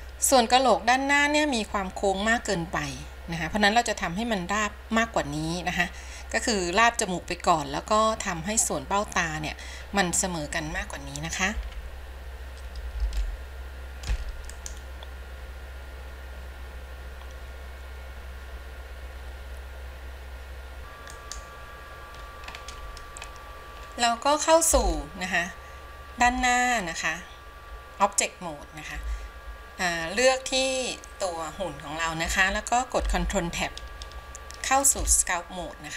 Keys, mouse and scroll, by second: 11.9 KP_1, 13.4-14.3 shift+middle drag, 14.7-20.8 drag, 21.2-22.8 drag, 22.8 scroll down 1, 22.8-23.4 scroll up 1, 23.4-24.0 scroll up 1, 24.0-24.4 scroll up 1, 25.0-26.8 shift+middle drag, 26.8-28.5 scroll up 1, 33.5 ctrl+Tab.